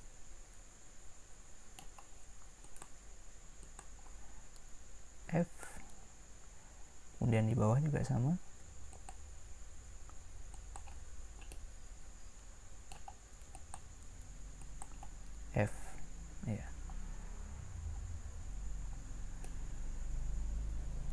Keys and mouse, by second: 2.6-5.3 drag, 5.3 f, 8.9-11.7 drag, 15.7 f, 17.9 middle click.